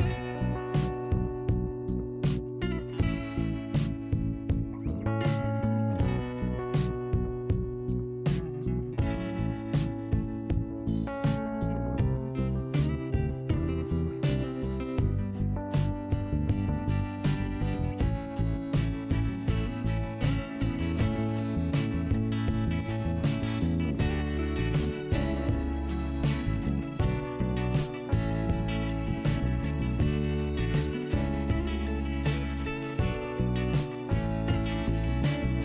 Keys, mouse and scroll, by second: 1.0 click, 1.0 scroll down 1, 2.0 scroll up 1, 3.5 click, 4.1 right click, 5.1 click, 6.5 click, 9.5 click, 9.6 click, 10.0-10.6 scroll down 1, 10.6 scroll up 1, 11.5 click, 12.6 click, 14.3-15.0 scroll down 1, 15.2 scroll up 1, 16.4 click, 17.4 click, 20.9 click, 20.9 click, 21.9 scroll down 1, 23.5 click, 24.9 click, 29.6 click, 31.6 click, 34.4 click.